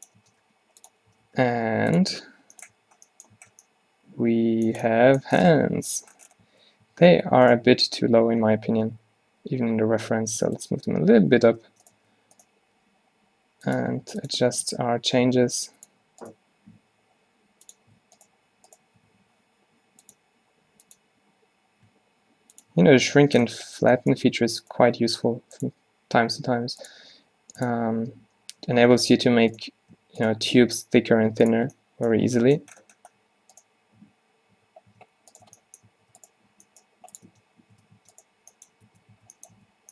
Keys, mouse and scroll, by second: 0.3 Tab, 0.5 g, 1.2 r, 2.1 Tab, 2.8 a, 3.4 a, 6.6 Tab, 7.0 Tab, 7.2 g, 7.7 Tab, 7.9 Tab, 8.5 Tab, 9.0 a, 9.2 a, 9.4 g, 10.9 Tab, 11.3 Tab, 11.8 Tab, 12.0 click, 12.1 Tab, 12.9 g, 14.0 g, 15.0 g, 16.9 g, 19.2 q, 24.7 click, 24.9 g, 26.5 g, 27.2 s, 28.1 d, 28.7 s, 30.7 s, 31.7 Tab, 32.8 Tab, 34.1 q, 34.6 g, 35.5 Tab, 36.0 Tab, 36.6 g, 37.4 Tab, 37.8 Tab, 38.1 Tab, 39.0 Tab, 39.2 a, 39.6 Tab.